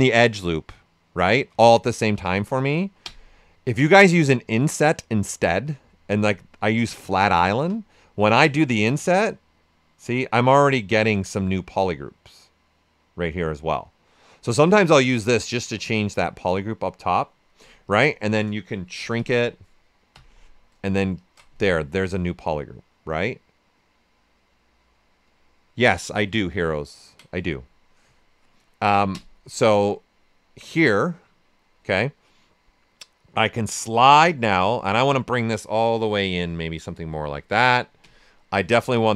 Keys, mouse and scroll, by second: 1.6 ctrl+z, 2.2 ctrl+z, 3.0 space, 6.2 space, 8.5-17.8 drag, 17.8 ctrl+shift+click, 18.9 ctrl+shift+s, 20.1 ctrl+w, 21.1 ctrl+shift+click, 25.3-29.1 right drag, 29.1 space, 33.4 space, 35.0-38.0 drag, 38.0 space.